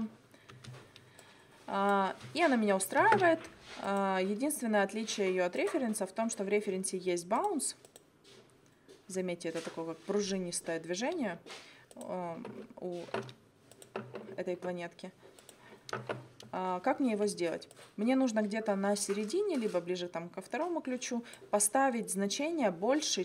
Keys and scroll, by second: 2.1 space.